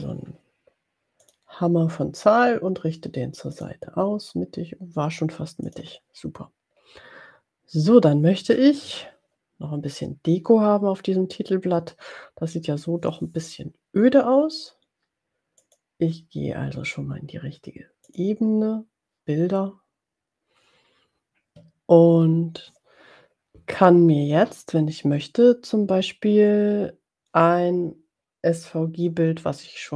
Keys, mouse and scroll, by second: 1.3 click, 3.5 click, 5.9 click, 15.5 click, 18.0 click.